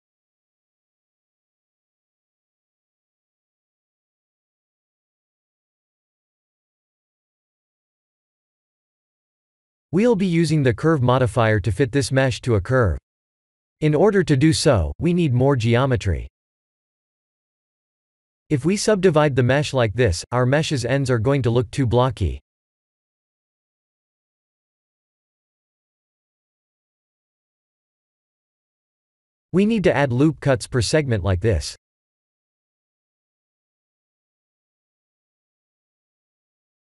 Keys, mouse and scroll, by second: 0.6 right click, 1.7-2.7 scroll down 4, 2.7 click, 3.9-5.2 scroll up 8, 5.6 shift+middle click, 6.1 middle click, 8.1 KP_1, 9.0-11.0 scroll down 9, 11.0-12.7 scroll down 3, 12.8 click, 13.4 Tab, 14.2 a, 14.9 right click, 16.5 click, 17.3 click, 19.0 Tab, 19.5-20.1 scroll up 4, 20.4 click, 22.5 middle click, 23.6-25.6 scroll up 4, 26.0 ctrl+z, 26.2 ctrl+z, 26.3 ctrl+z, 27.2 middle click, 28.2 scroll down 2, 30.1 ctrl+r, 35.2 click.